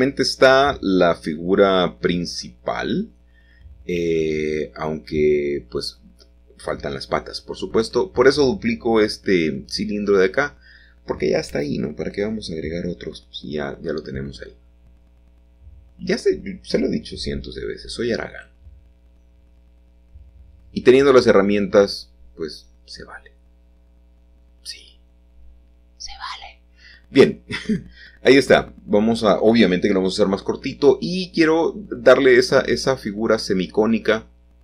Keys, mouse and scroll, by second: 0.7 shift+d, 2.3 click, 3.2 r, 5.1 Return, 9.6-12.3 middle drag, 10.0-11.3 scroll up 1, 13.0 g, 16.4-19.4 drag, 19.4 middle click, 20.2 g, 22.1 click, 22.8 s, 23.9-25.6 drag, 25.6 middle click, 25.9-26.9 drag, 27.1 g, 27.6 z, 29.1-30.5 drag, 29.1 middle click, 29.3 s, 30.8-33.1 drag, 30.8 middle click, 33.1 middle click, 33.3-34.4 scroll down 1.